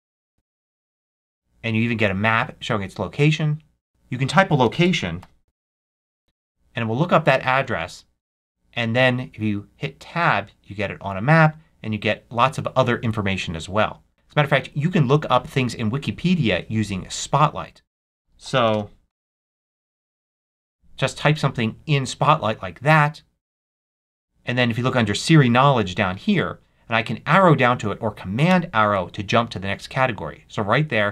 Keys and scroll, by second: 0.0-0.2 typing, 0.3 Tab, 3.9 super+a, 4.3-6.4 typing, 7.5 Tab, 17.9 super+a, 18.1 super+w, 18.3-20.7 typing, 28.4 super+Down.